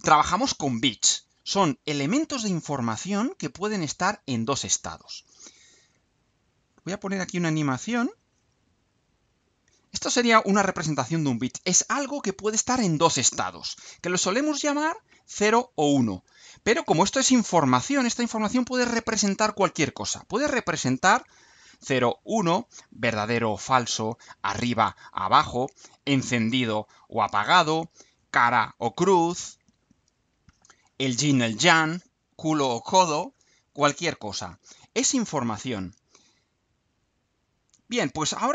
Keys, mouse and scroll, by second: 7.9 click, 8.9 click, 37.9 click.